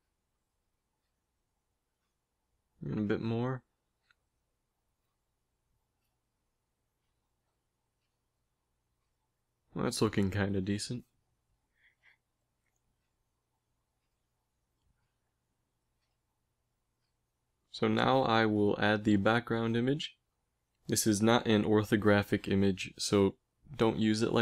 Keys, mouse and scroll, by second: 2.7 s, 5.4 s, 6.7 middle click, 7.9 s, 10.1 KP_1, 12.1 g, 14.7 n.